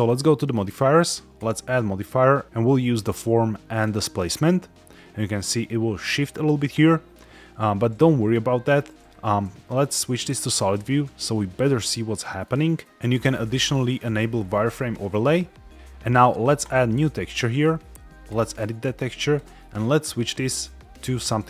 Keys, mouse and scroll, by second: 0.2 click, 1.3-3.7 drag, 5.3 middle click, 5.9 scroll down 1, 9.4 z, 11.0-11.5 shift+middle drag, 11.7 middle click, 12.8-13.4 drag, 13.8-15.4 drag, 15.7 shift+middle click, 16.5 click, 18.2 click, 19.2-21.4 drag.